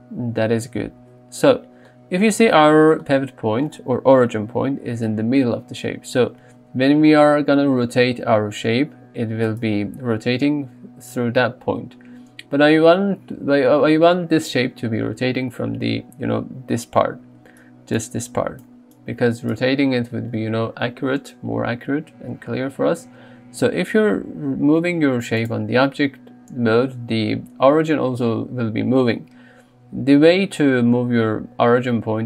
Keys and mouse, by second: 4.2 KP_3, 8.5 r, 9.5-11.6 right drag, 17.6-19.6 d, 17.7 click, 24.4 g.